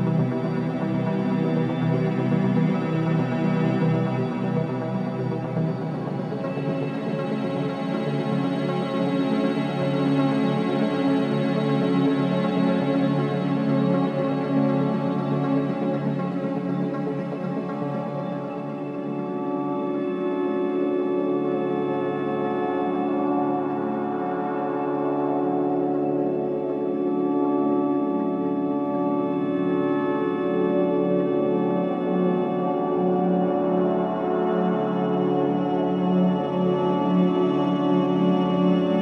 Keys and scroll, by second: 0.4 space, 6.8 space, 8.2 ctrl+space, 11.2 ctrl+space, 12.5 space, 14.6 z, 15.1 space, 18.5 ctrl+shift+space, 19.0 c, 22.0 ctrl+3, 23.3 ctrl+3, 27.1 KP_3, 27.5 v, 28.2 space, 35.8 c.